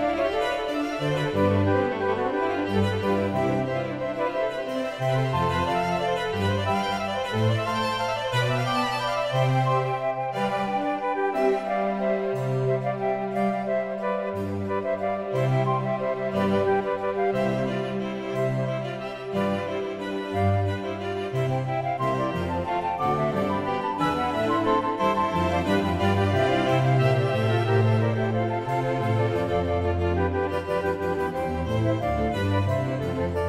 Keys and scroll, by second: 3.4 ctrl+e.